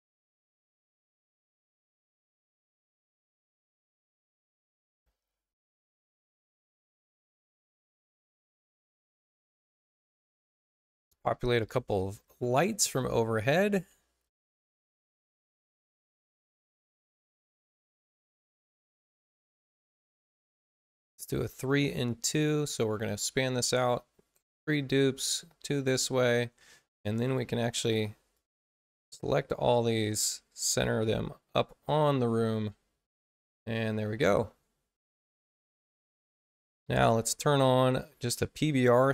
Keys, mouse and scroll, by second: 2.7 shift+Tab, 4.1 Tab, 6.3 click, 11.9 Tab, 15.6 click, 16.4 space, 17.1 click, 19.0 ctrl+k, 20.5 3, 21.4 click, 22.6-23.8 right drag, 25.1 click, 27.7 2, 28.3-29.5 drag, 30.3-31.0 typing, 31.6 click, 34.6 Tab.